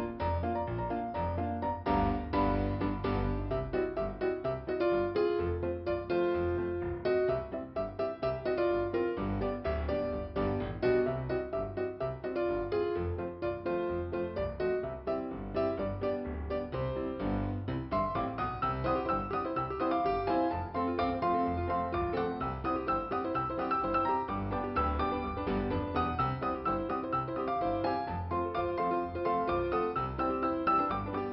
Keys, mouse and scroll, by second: 0.5 click, 0.8 typing, 1.5 scroll down 1, 5.4 click, 6.7 click, 6.9 click, 8.8 click, 10.0 click, 12.8 click, 13.0 click, 13.1 double click, 14.2 double click, 17.0 click, 19.2 click, 21.6 click, 23.9 click, 26.4 click, 27.0 click, 30.0 click.